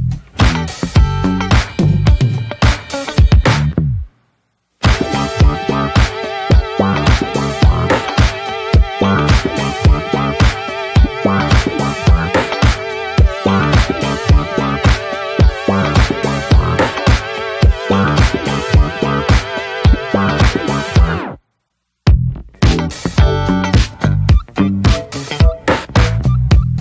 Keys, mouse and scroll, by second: 0.5 shift+middle click, 1.2 e, 2.9 shift+middle click, 3.4 e, 7.4 click, 8.0 shift+middle click, 8.5 e, 10.0 click, 10.9 ctrl+r, 12.7 shift+middle click, 12.9-13.5 scroll up 2, 13.5 ctrl+r, 23.7 scroll down 3, 24.1-24.4 shift+middle drag, 24.4 click, 24.5 ctrl+a, 25.0-25.3 shift+scroll up 2, 25.3 Tab, 25.6 scroll down 2, 25.8-26.1 middle drag, 26.1 Tab, 26.2 click, 26.4 scroll down 2, 26.6 shift+scroll up 1, 26.6-26.8 shift+middle drag.